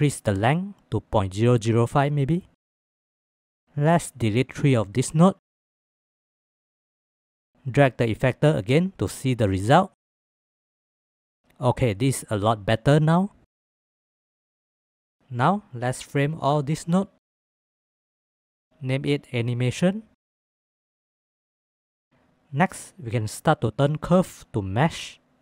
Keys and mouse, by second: 4.2-5.0 drag, 14.9 click, 17.8-20.1 drag, 21.8 ctrl+s, 25.0 ctrl+s.